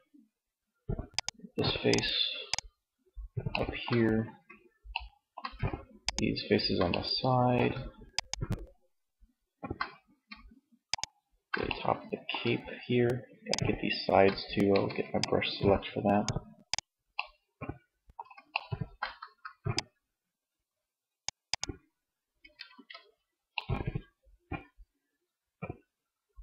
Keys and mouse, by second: 2.8 middle click, 3.1-4.1 middle drag, 13.7 g, 18.1 c, 21.0 middle click, 21.9 ctrl+z, 22.8 ctrl+z, 23.6 middle click.